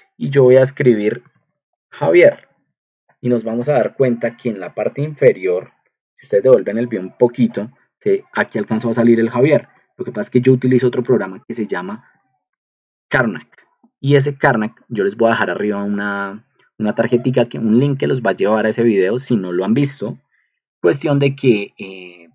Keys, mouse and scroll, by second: 0.2 click, 0.9-2.3 typing, 2.5 ctrl+2, 13.4 typing.